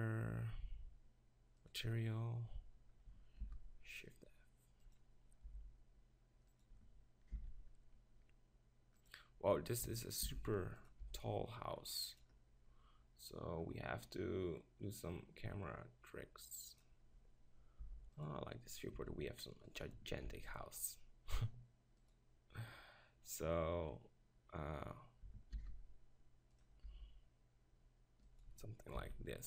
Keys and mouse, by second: 3.5 shift+f, 5.0-5.9 drag, 5.5 g, 7.4 shift+f, 7.5-8.6 drag, 10.3 shift+f, 10.9-17.0 drag, 11.0 g, 17.8 g, 18.3 click, 19.0 g, 20.3 shift+f, 23.5-25.3 drag, 25.6 shift+f, 26.7-28.5 drag, 26.9 g, 29.0 shift+f.